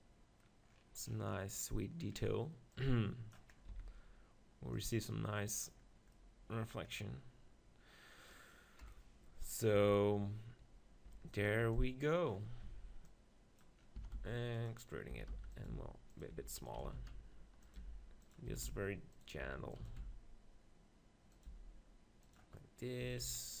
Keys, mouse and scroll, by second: 2.7-4.0 drag, 3.7 z, 4.0-6.1 middle drag, 6.1 click, 6.5 middle click, 8.8 KP_1, 9.8 z, 11.1 Tab, 11.4-13.0 drag, 11.6 b, 12.6 Tab, 14.0 s, 15.2-19.8 typing, 16.2-21.1 drag, 21.4-23.6 drag, 21.5 g, 23.0 Tab, 23.2 z.